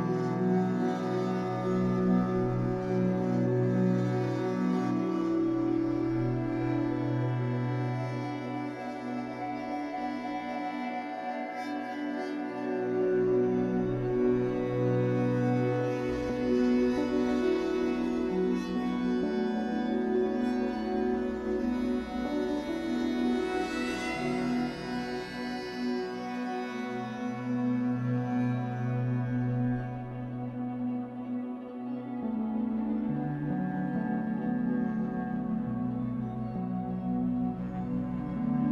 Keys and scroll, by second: 6.3 q, 12.0 q, 16.5 1, 18.0 w, 21.6 ctrl+z, 22.9 Escape, 23.8 w, 28.3 Escape, 29.1 1, 29.7 w, 34.4 Escape.